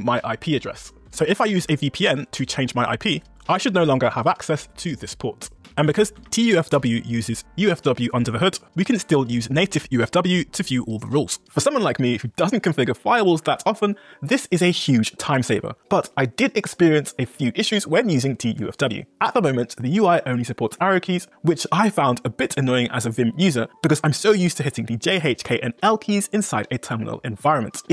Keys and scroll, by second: 8.4-9.6 typing, 19.9 Up, 20.7 Down, 21.7 Up, 22.0 Down, 22.3 Up, 22.6 Down, 22.8 Up, 24.3 j, 25.0 k, 26.2 j, 27.5 k.